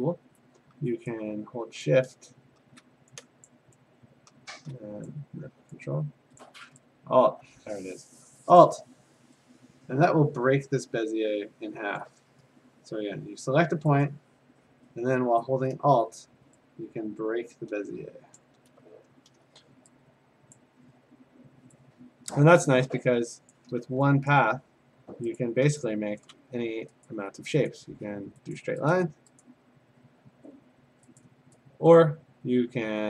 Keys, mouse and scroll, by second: 0.7 click, 1.8 shift+click, 3.5 click, 5.1 click, 6.4 click, 8.6 click, 12.0 alt+click, 14.0 click, 18.4 alt+click, 20.6 click, 23.5 click, 24.1 v, 24.3 click, 25.4 click, 26.2 click, 26.2 click, 26.3 click, 27.1 click, 27.7 click, 28.8 click, 28.9 click, 29.4 click, 31.2 click, 32.0 click.